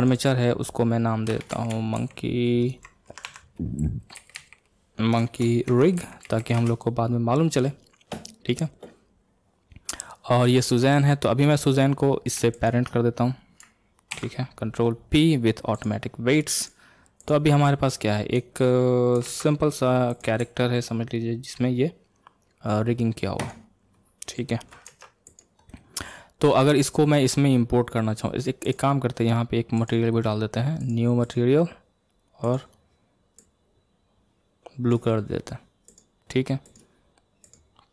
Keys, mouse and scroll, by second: 0.1-6.5 drag, 3.2 BackSpace, 10.4 click, 12.5 shift+click, 14.1 ctrl+p, 15.8 ctrl+p, 16.5 click, 17.2 click, 17.6-19.2 middle drag, 19.2 ctrl+Tab, 20.0 click, 20.4 r, 24.8 ctrl+Tab, 25.2 click, 25.6-28.6 middle drag, 28.6 click, 29.7 click, 30.8 click, 31.2-32.5 drag, 33.3 click, 35.9 click, 36.6 click, 37.4 click.